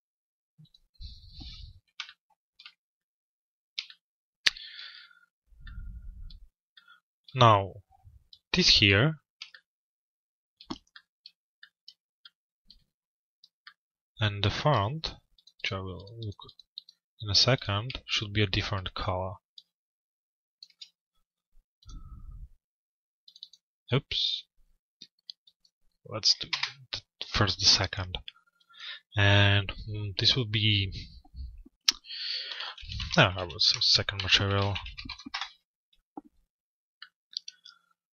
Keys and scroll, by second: 26.1 Return, 34.9 Return.